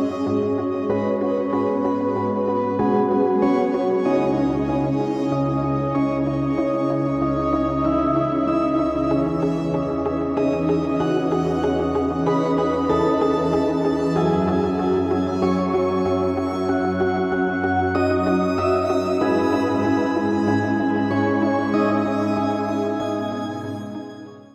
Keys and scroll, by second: 4.6 shift+Tab, 6.8 z, 8.8 r, 12.2 shift+z.